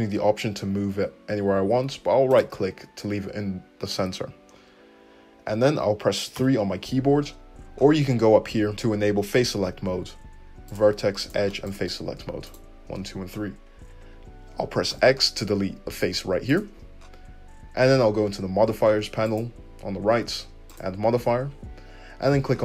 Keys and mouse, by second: 6.4 3, 10.6-19.3 drag, 12.4 right click, 14.9 x, 19.3-20.8 middle drag, 20.8-22.6 drag.